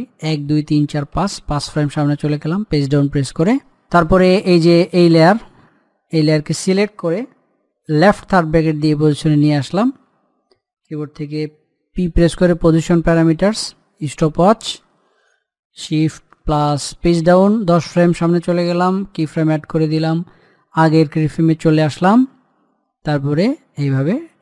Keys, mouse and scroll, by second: 0.2 Page_Down, 8.0 i, 12.0 p, 14.0 click, 17.1 shift+Page_Down, 19.2 click, 23.3-24.4 drag.